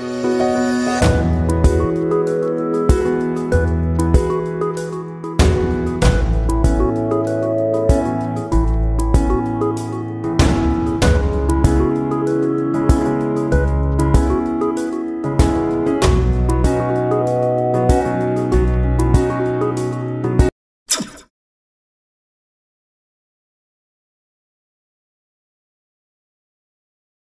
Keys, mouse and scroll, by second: 1.8 click, 4.9 ctrl+a, 6.0-8.8 drag, 8.8 ctrl+alt+-, 9.9 ctrl+t, 11.5 ctrl+click, 13.5-15.3 ctrl+drag, 16.0-19.4 ctrl+drag.